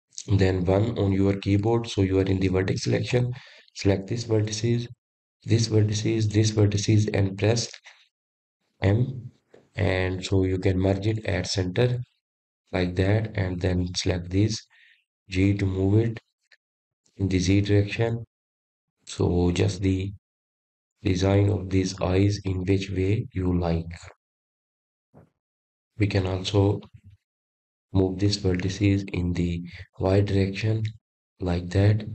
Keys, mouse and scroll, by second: 1.3-1.9 scroll up 2, 1.9-4.4 scroll down 1, 5.3 1, 6.8 click, 9.0 shift+click, 9.9 shift+click, 12.4 m, 16.8 click, 19.0 g, 25.6-26.5 scroll down 2, 29.9-30.5 scroll up 1, 30.5 click, 32.0 g.